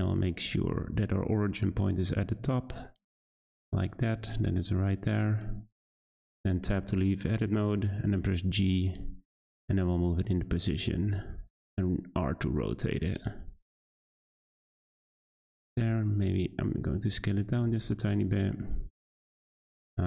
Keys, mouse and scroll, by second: 3.8-5.7 scroll up 3, 5.7-6.0 scroll down 3, 6.0 Tab, 8.0 g, 10.9 r, 13.6 g, 15.3 Tab, 15.6 a, 15.7 s, 17.1 Tab, 17.6 g, 19.2 click, 19.6-20.0 middle drag.